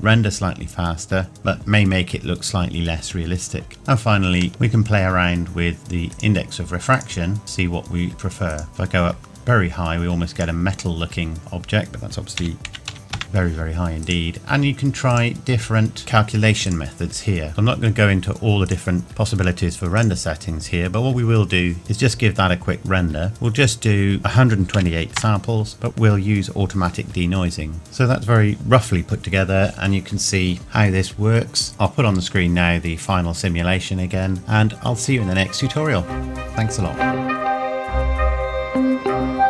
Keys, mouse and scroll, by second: 3.8 click, 4.5 click, 6.1 click, 12.4 KP_1, 14.0 click, 23.3 click, 24.2 KP_2.